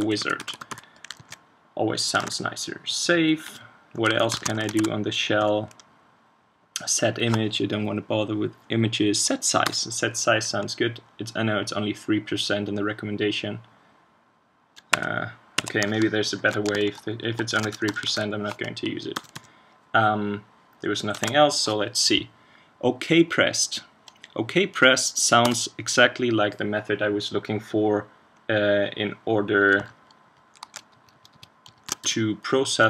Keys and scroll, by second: 1.2 super+Right, 2.2 super+Right, 2.3 super+s, 4.7 ctrl+space, 16.3 super+Right, 17.2 shift+super+Left, 17.9 shift+super+Left, 18.1 super+s, 21.1 ctrl+space, 29.9 shift+super+Left.